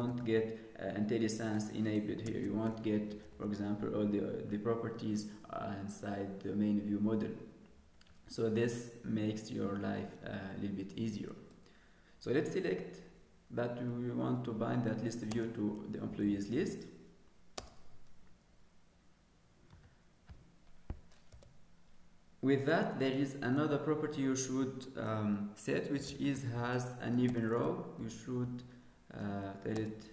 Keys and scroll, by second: 2.1 ctrl+space.